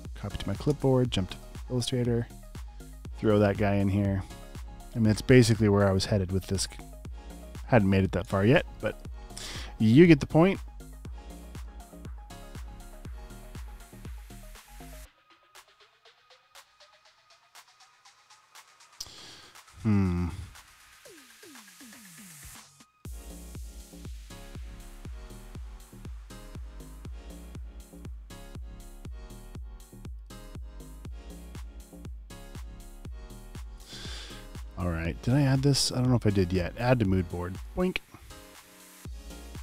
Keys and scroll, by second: 2.7 super+v, 6.7 typing, 7.0 super+space, 8.5 alt+super+space, 9.1 space, 9.2 space, 25.1 super+v.